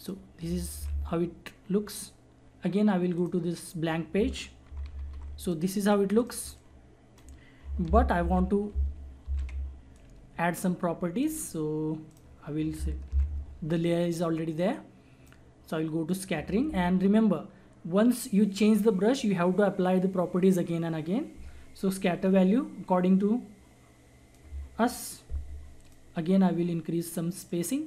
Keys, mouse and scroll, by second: 0.0 click, 0.7 ctrl+z, 3.1 click, 4.7-5.3 typing, 5.4 click, 7.8 ctrl+z, 9.9 click, 9.9-12.0 drag, 13.1 ctrl+z, 14.5 click, 14.9 click, 15.0 click, 22.0-27.8 drag.